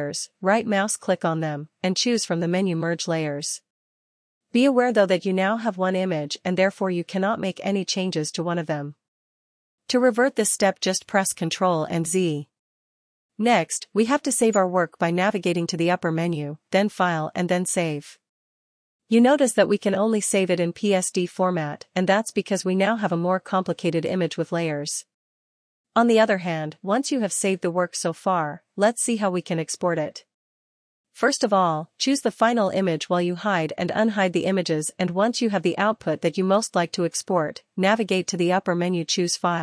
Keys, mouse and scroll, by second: 0.7 ctrl+m, 4.2 right click, 9.1 click, 11.2 right click, 17.1 click, 20.5 ctrl+z, 23.2 click, 24.7 click, 27.7 click, 31.4 click, 34.4 click, 39.1 click.